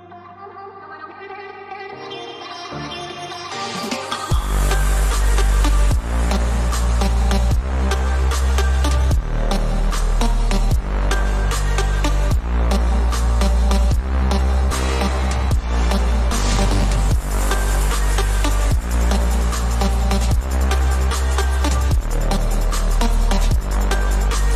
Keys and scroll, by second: 17.6 ctrl+o.